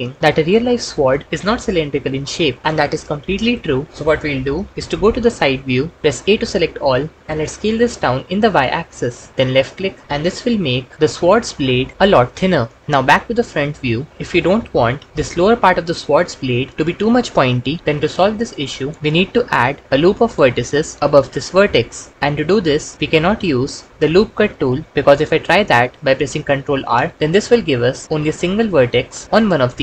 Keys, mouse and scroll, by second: 0.3 Tab, 1.2 alt+z, 3.9 Tab, 5.1 KP_3, 6.0 a, 7.2 s, 7.6 y, 10.0 s, 10.3 y, 12.8 ctrl+s, 13.1 KP_1, 19.0 ctrl+Escape, 22.2 g, 26.5 ctrl+r, 28.0 click.